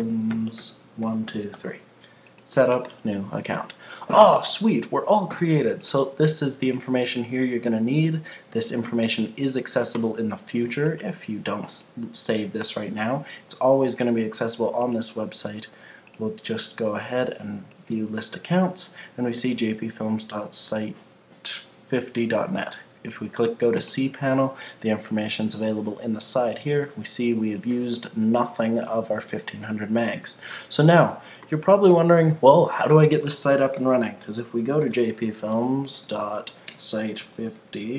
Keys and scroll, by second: 33.8 super+t, 35.5 Right.